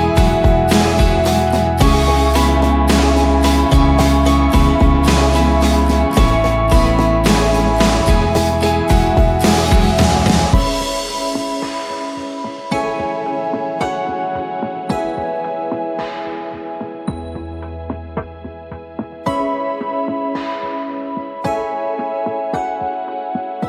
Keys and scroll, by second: 0.0 v, 3.9-4.8 typing, 8.5 ctrl+d, 8.6-9.1 Up, 9.3 Up, 9.5 Up, 17.9 ctrl+t, 19.0 ctrl+z, 22.7 Return, 23.2 v.